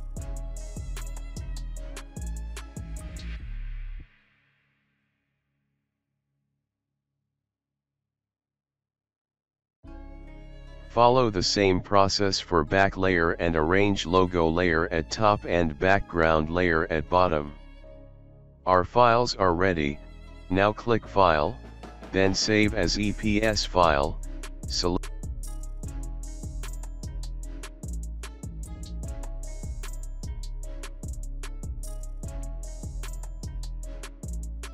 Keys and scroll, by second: 2.5-3.5 typing, 4.2 Return, 5.8-8.2 typing, 15.7 alt+space, 16.8 space, 22.1 BackSpace, 22.1 BackSpace, 22.2 BackSpace, 23.7 ctrl+a, 24.5-27.3 typing, 27.6 Left, 27.7 Left, 27.8 Left, 27.8 Left, 27.9 Left, 28.5 Right.